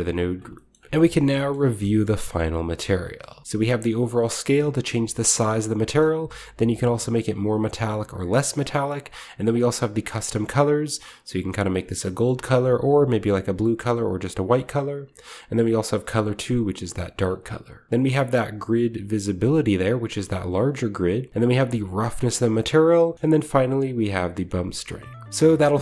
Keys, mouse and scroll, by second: 1.5-2.9 shift+middle drag, 1.9-2.6 shift+scroll down 1, 2.6 shift+scroll up 1, 3.2 shift+middle click, 3.5-5.6 shift+drag, 5.6 shift+middle click, 6.5-8.5 drag, 8.5 middle click, 8.9 drag, 9.5-14.5 drag, 15.3 click, 16.1-17.2 drag, 17.9-20.6 drag, 20.6 middle click, 20.7 click, 21.3-22.8 shift+right drag, 22.8 shift+middle click, 23.0 shift+click, 23.2-24.5 right drag, 24.5 middle click, 25.1 shift+click, 25.5 shift+middle click.